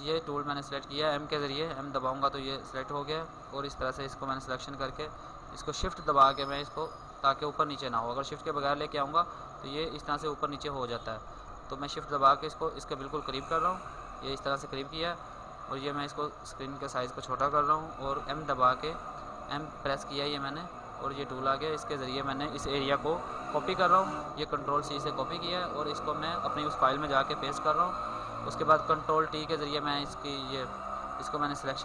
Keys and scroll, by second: 7.8 ctrl+z, 8.8 ctrl+z, 14.7 alt+space, 23.1 ctrl+c, 25.3 ctrl+c, 26.7 ctrl+Tab, 26.7 ctrl+v, 27.1 ctrl+t.